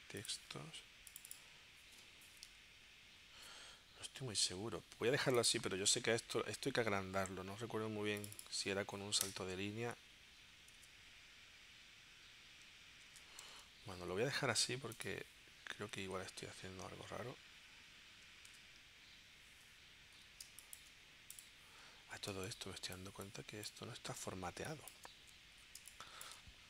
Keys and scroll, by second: 9.2 Return, 10.8 super+Tab, 14.0 super+z, 15.9 super+Tab, 18.5 super+Tab, 20.4 space, 22.3 space, 25.8 space.